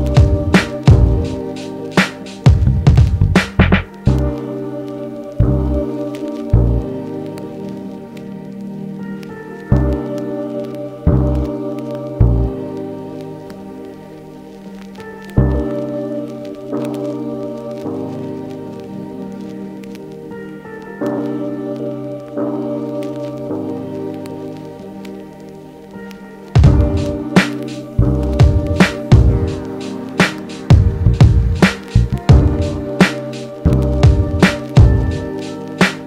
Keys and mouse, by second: 31.3 f, 31.7 middle click, 31.8-36.0 drag.